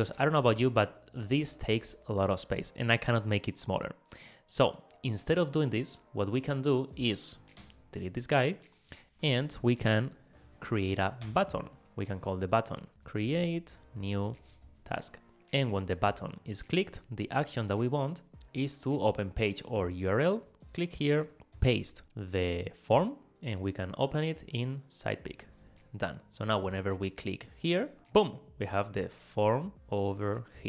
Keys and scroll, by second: 11.3 Return, 21.6 super+v.